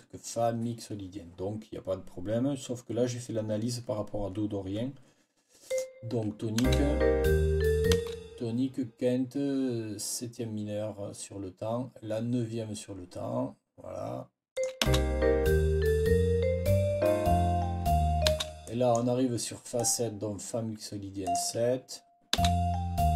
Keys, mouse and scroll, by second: 5.6 scroll up 1, 6.5 space, 7.8 space, 14.4 click, 14.7 space, 18.2 space, 18.5 click, 19.7 click, 21.1 click, 22.2 space.